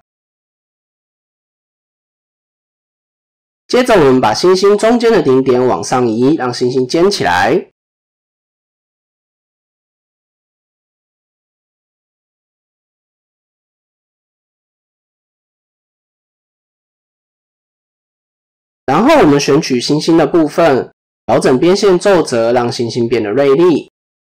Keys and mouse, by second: 0.2 middle drag, 0.9 KP_7, 1.7 Tab, 2.1 shift+middle click, 2.5 middle click, 2.8 1, 3.3 shift+middle click, 4.3 click, 4.6 middle click, 5.9 shift+middle click, 6.8-7.9 drag, 8.0 middle click, 8.9 middle click, 9.8 KP_7, 10.6 shift+middle click, 15.9 click, 17.3 KP_1, 17.9 click, 18.5-19.2 drag, 19.5 middle drag, 20.7-22.5 drag, 23.2 click, 23.6-24.1 middle drag.